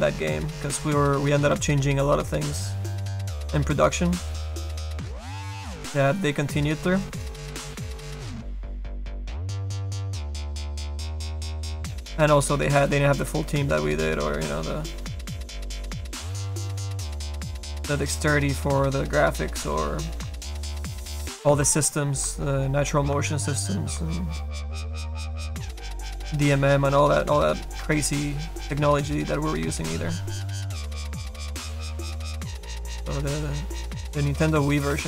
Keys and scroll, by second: 1.6 s, 25.9 s, 26.3 s, 28.3 s, 33.2 ctrl+z.